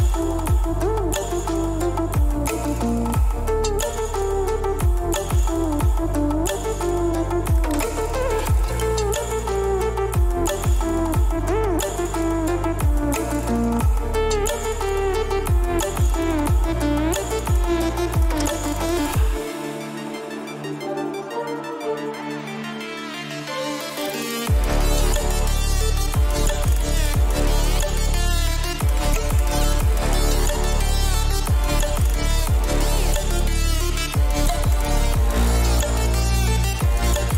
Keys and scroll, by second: 12.4 ctrl+shift+a, 34.9 ctrl+=, 36.2 ctrl+=.